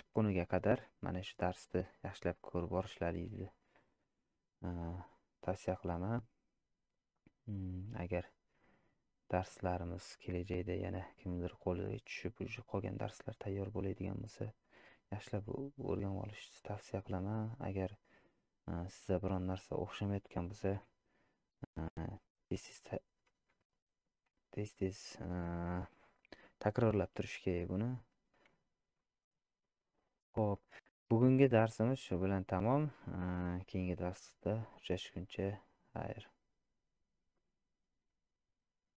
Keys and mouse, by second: 18.8 click, 24.2 z, 27.1-28.1 middle drag, 28.6 z.